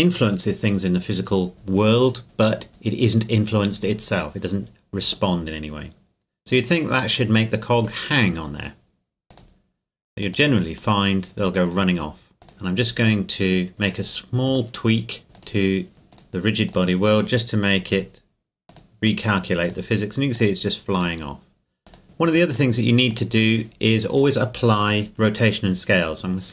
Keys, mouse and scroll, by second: 9.3 click, 11.0 middle click, 12.4 click, 15.3 click, 16.7 click, 24.1 right click.